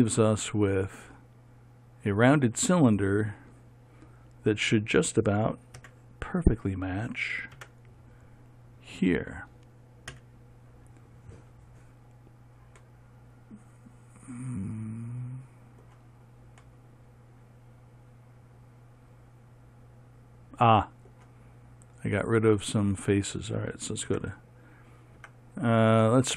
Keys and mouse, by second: 0.2-8.1 middle drag, 8.1 Tab, 10.7 a, 14.9-19.3 middle drag, 24.7 Tab.